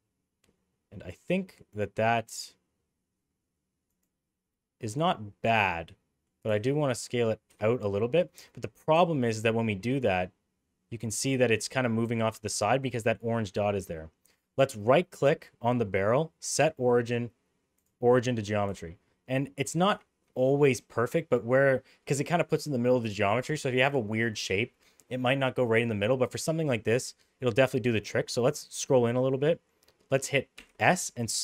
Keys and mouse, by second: 4.5-6.2 middle drag, 6.6 s, 7.8-8.1 middle drag, 8.9 s, 14.8-17.8 right drag, 18.7 s, 30.6 s.